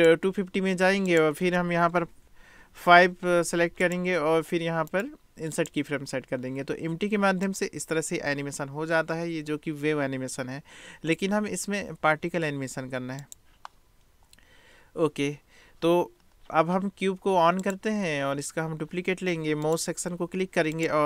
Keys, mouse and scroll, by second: 1.1-3.9 drag, 4.9 click, 7.4 click, 13.3 drag, 17.7 click, 19.7 click.